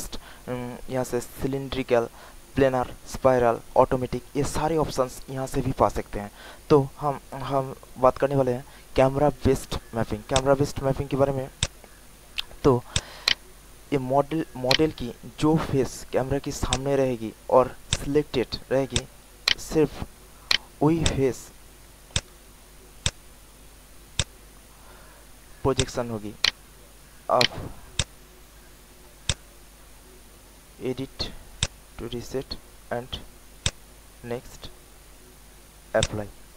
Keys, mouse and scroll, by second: 12.9 alt+click, 13.2 alt+right click, 13.7 alt+middle click, 14.2 alt+click, 14.6 alt+right click, 16.6 alt+click, 17.3 alt+middle click, 18.8 alt+click, 19.4 alt+right click, 20.1 alt+middle click, 20.4 alt+right click, 21.0 alt+click, 22.1 click, 25.7 alt+click, 26.4 alt+right click, 27.0 alt+middle click, 27.4 alt+right click, 27.9 alt+click, 28.7 alt+middle click, 29.2 alt+click, 30.2 alt+middle click, 31.6-36.5 drag.